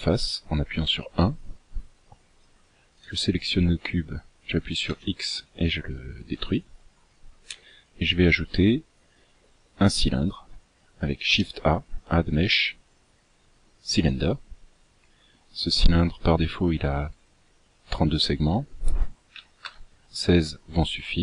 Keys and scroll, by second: 0.9 KP_1, 5.0 x, 11.4 shift+a.